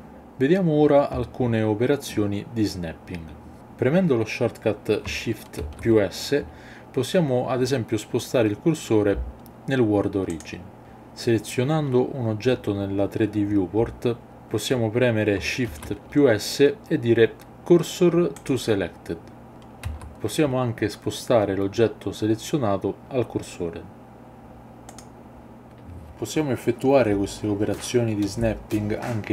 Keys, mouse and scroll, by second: 5.6 shift+s, 15.7 shift+s, 19.8 shift+s.